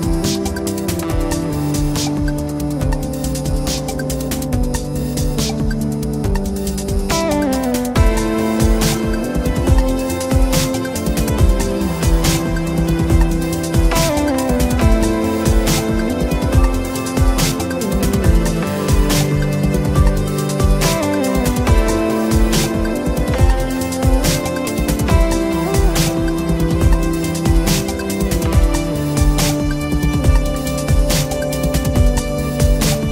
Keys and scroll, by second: 3.2 Return, 5.8 Return, 9.3 Return, 12.3 Return, 16.7 Return, 19.7 Return, 21.9 Escape.